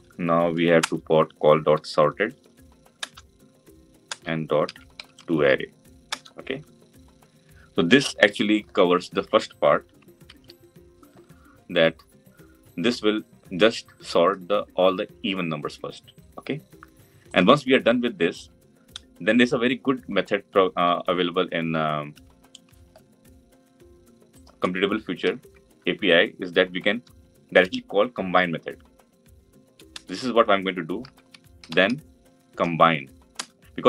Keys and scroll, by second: 2.8 Return, 10.1 ctrl+alt+l, 20.7 Delete, 33.2 Return.